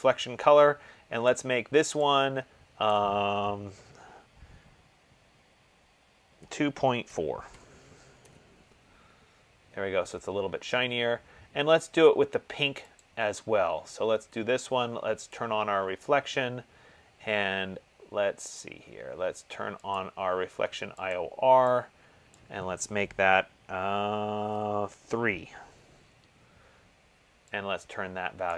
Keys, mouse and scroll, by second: 1.8 click, 3.5 click, 6.5-7.6 typing, 8.4 Tab, 13.3 click, 15.5 click, 20.2 click, 21.4 click, 22.5 click, 25.3 3.